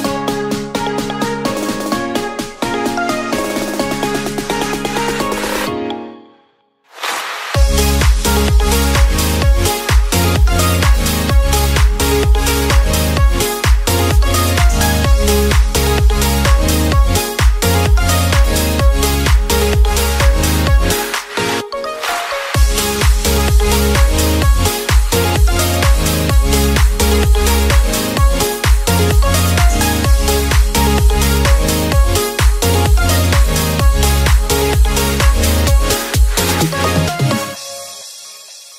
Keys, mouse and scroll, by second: 0.4-4.1 drag, 4.1-4.6 scroll up 1, 4.6-5.6 scroll up 1, 5.6-6.9 drag, 6.9-7.6 scroll up 1, 7.6 click, 10.4 Tab, 11.0-13.6 right drag, 14.0 Tab, 15.1-16.1 middle drag, 16.1-16.5 scroll up 2, 16.5 Tab, 17.1 right click, 18.2 Tab, 18.7-19.4 scroll down 1, 19.4 a, 20.3 shift+d, 21.2 click, 22.6-23.7 middle drag, 23.7 click, 25.7-26.1 scroll down 2, 26.1 middle click, 27.0-27.6 scroll down 1, 27.6 KP_7, 29.0 shift+d, 31.9-33.3 middle drag, 33.3 click, 35.3 middle click, 35.8 shift+d, 36.8 click, 38.6 click.